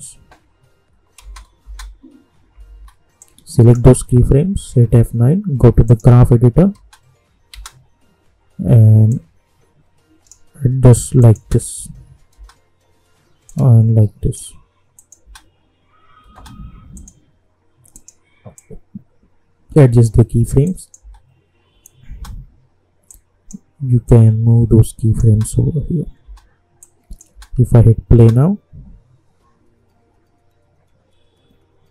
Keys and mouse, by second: 1.2 space, 2.5 j, 2.7 j, 3.2-4.6 drag, 4.6 F9, 5.8 click, 6.8 space, 9.1-11.2 drag, 11.4 space, 13.8 shift+click, 15.2 space, 16.9-20.6 drag, 21.0 space, 23.0-25.2 drag, 25.2 space, 26.8-28.2 drag, 28.2 space.